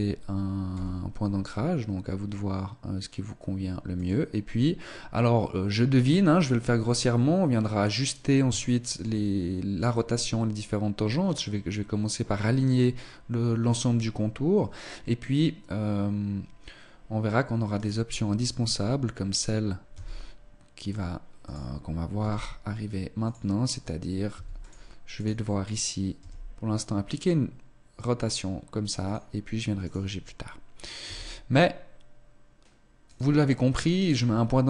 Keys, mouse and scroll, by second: 0.7 r, 8.6 shift+middle click, 17.8 right click, 19.9 e, 21.7 click, 22.2 g, 24.3 s, 24.7 click, 24.9 right click, 26.2 r, 29.8 right click, 31.1 e, 33.9 right click.